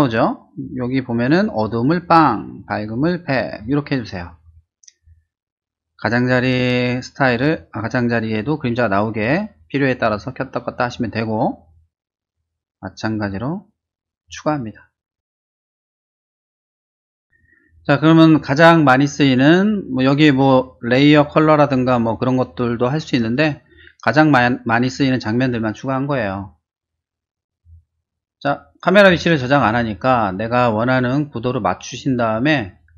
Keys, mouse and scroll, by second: 1.6-2.2 drag, 2.9-3.6 drag, 6.8 click, 10.1 middle click, 10.3 middle click, 11.7 click, 13.8 click, 14.6-15.9 typing, 16.6 Return, 27.3 click, 27.5 click, 28.4 middle click, 29.7 middle click, 30.4 shift+middle click, 30.9 middle click, 32.0 scroll down 2, 32.2 middle click, 32.8 middle click.